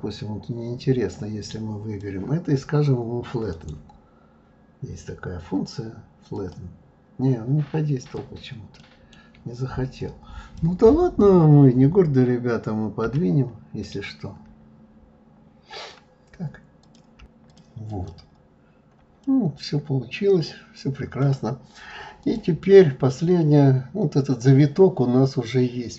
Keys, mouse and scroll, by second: 3.5-6.5 right drag, 8.0 click, 8.8 middle click, 10.0-13.1 drag, 13.1 g, 16.8 click, 17.5 click, 18.8-19.2 scroll up 1, 19.2-22.2 middle drag, 22.2 click, 22.6-23.7 scroll down 11, 23.8-24.6 scroll up 2, 24.6-25.9 middle drag.